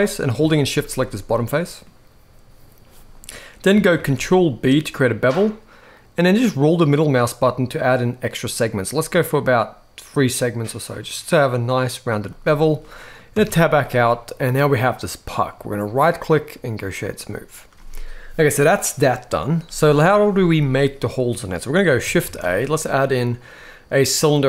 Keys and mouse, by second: 0.3 shift+click, 1.1 middle click, 3.6 ctrl+b, 12.5 middle click, 13.0 Tab, 13.5-15.2 middle drag, 15.7-16.6 right drag, 20.7 middle click, 21.9 shift+a.